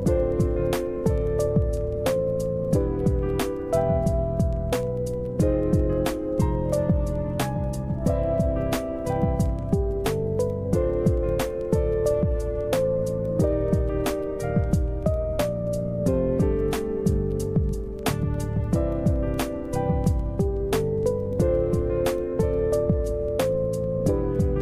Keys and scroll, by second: 13.5 space.